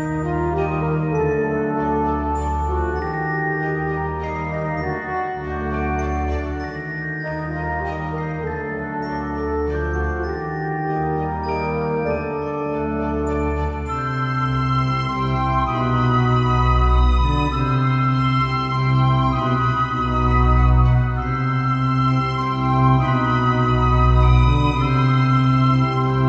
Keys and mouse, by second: 0.7 g, 4.1 s, 5.0 g, 6.6 g, 7.4 s, 8.0 g, 9.6 s, 10.1 g, 12.2-18.8 typing, 20.0 KP_7, 21.1-22.5 typing, 23.4 ctrl+z, 23.6-24.5 typing, 25.8-26.2 typing.